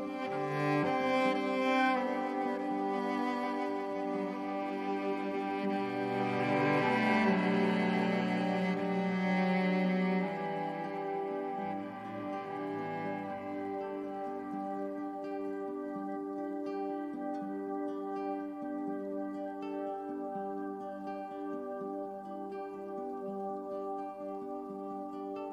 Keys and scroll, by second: 7.5 BackSpace, 15.5 i, 18.5 v, 22.3 i, 23.7 v.